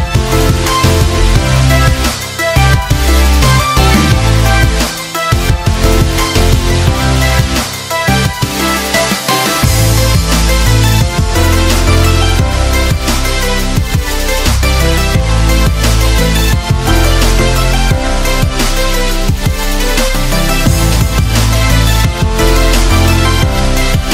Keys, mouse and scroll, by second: 3.8 ctrl+w, 6.6 ctrl+w, 7.4-8.3 drag, 9.2-9.9 scroll up 1, 9.9-13.6 drag, 16.6 Delete, 16.8 click, 17.3 Delete, 17.7 click, 18.3 Delete, 18.5 click, 19.4 Delete, 19.9 click, 23.5 click.